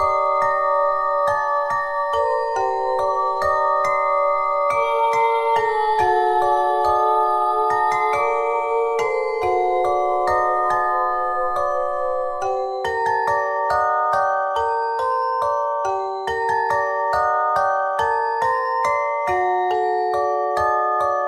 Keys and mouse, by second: 0.4 s, 1.9 click, 2.7-4.4 middle drag, 4.8 s, 6.5 click, 6.6 z, 7.5-8.6 middle drag, 9.8 ctrl+n, 13.0 KP_1, 13.6 z, 14.8 ctrl+Tab, 16.0 c, 17.1-18.6 drag, 19.3 c, 19.7-21.0 drag.